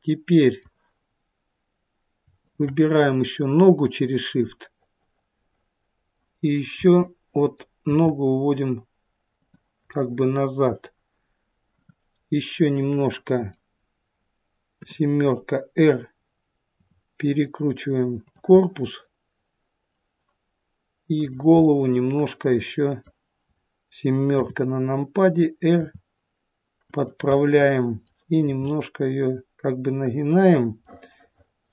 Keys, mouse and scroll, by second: 2.3 shift+click, 3.1 middle click, 6.8 middle click, 7.8 g, 11.6 click, 12.4 middle click, 15.4 KP_7, 16.6 r, 18.5 middle click, 21.1 click, 21.6 middle click, 24.6 KP_7, 25.7 r, 27.2 middle click, 28.5 r, 30.9 middle click.